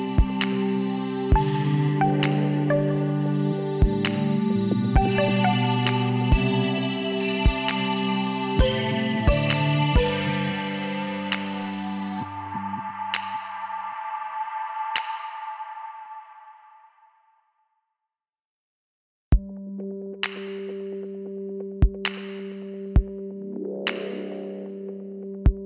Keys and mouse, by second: 0.8 e, 4.1 ctrl+z, 5.6-7.5 drag, 6.0 b, 7.4 x, 10.4 KP_Decimal, 11.9 z, 16.5 middle click, 16.9-18.3 drag, 18.3 KP_1, 18.9 click, 20.3 e.